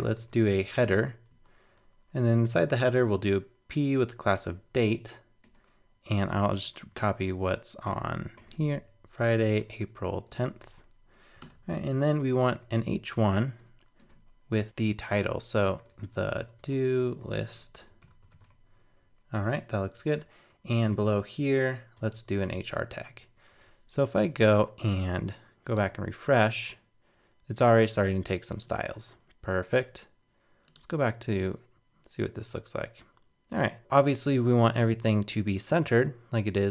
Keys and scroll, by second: 11.4 super+Return, 23.5 super+s, 23.9 super+Tab, 25.8 super+r.